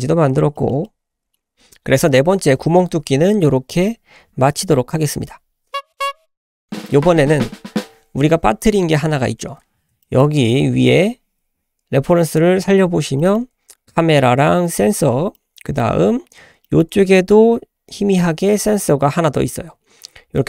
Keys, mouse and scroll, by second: 0.1-0.5 scroll down 2, 0.5 shift+middle drag, 0.8-2.7 middle drag, 6.6 middle click, 6.6-7.8 scroll down 2, 9.6-9.9 scroll up 2, 10.0-10.4 shift+middle drag, 10.4-10.8 scroll up 3, 10.8-12.3 shift+middle drag, 12.3 click, 12.9 scroll up 1, 13.2-13.5 shift+middle drag, 13.5 scroll up 1, 14.7-15.2 scroll down 3, 15.3 shift+middle click, 16.1-18.7 scroll up 6, 16.6 shift+middle drag, 19.3-19.8 scroll down 4.